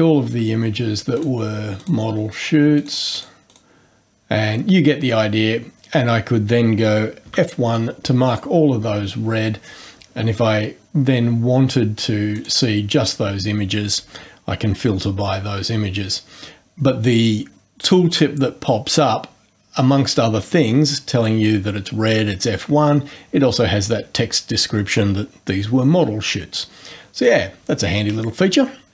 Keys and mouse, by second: 1.2 ctrl+click, 1.8 ctrl+click, 2.8 ctrl+click, 3.2 ctrl+click, 3.5 ctrl+click, 7.3 F1, 12.4 click.